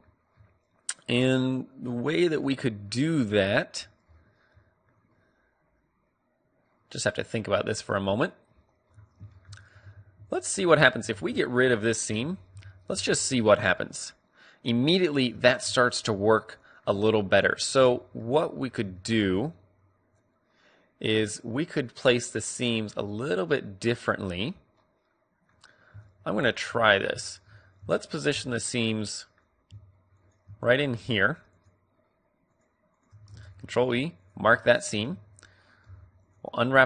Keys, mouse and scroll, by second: 2.5-3.1 scroll up 1, 3.1-6.1 middle drag, 7.8 middle click, 8.8-9.8 middle drag, 9.8 a, 10.2-11.9 right drag, 11.0 ctrl+e, 11.9 click, 12.0 a, 12.4 a, 12.9 u, 15.3-20.8 middle drag, 17.7 a, 23.1-24.7 middle drag, 26.2-28.5 right drag, 28.5-30.0 middle drag, 30.0-34.5 right drag, 33.4 ctrl+e, 34.5 middle click, 34.9 a, 35.0 a, 35.8 u.